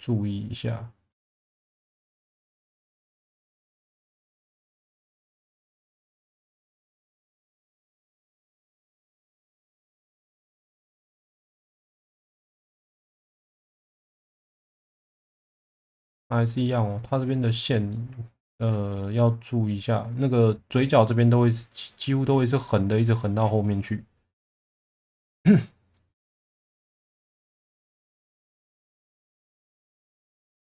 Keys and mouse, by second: 4.8 click, 5.5 click, 7.0 click, 8.0 2, 9.9 1, 10.8 click, 11.9 2, 12.1 click, 12.6 1, 12.8 click, 13.5 click, 16.2 middle click, 17.8 alt+middle click, 24.5 click, 28.4 click, 29.4 click.